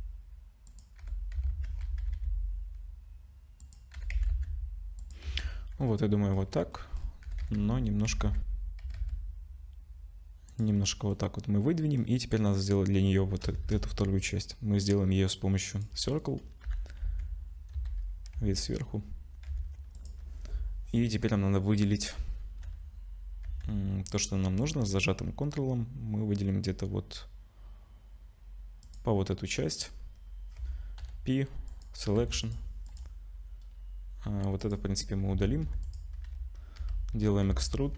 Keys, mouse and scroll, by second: 1.0 g, 3.9 g, 5.3 z, 5.8 middle click, 6.3-7.1 scroll down 4, 6.7 middle click, 7.2 g, 10.8 middle click, 11.7 middle click, 13.6 shift+a, 16.7 /, 17.0 Tab, 17.7 KP_7, 18.3 z, 19.5 1, 20.0 click, 22.7 2, 23.5 1, 24.1 click, 28.8 ctrl+click, 30.0-30.3 scroll down 2, 31.0-31.8 scroll down 1, 31.0 p, 32.2 Tab, 32.4 click, 32.9 click, 34.3 Delete, 34.6 click, 35.3 Tab, 35.6 1, 35.8 click, 36.2-36.8 scroll up 1, 36.8 e.